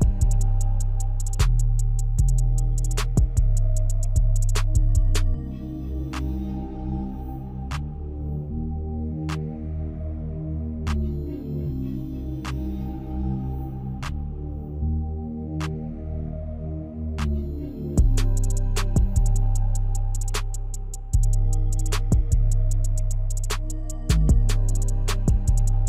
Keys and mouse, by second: 1.7 click, 3.4 click, 4.2 click, 4.9 click, 6.2 click, 9.7-12.4 drag, 13.4-14.4 drag, 14.8-18.9 drag, 19.5-25.8 drag.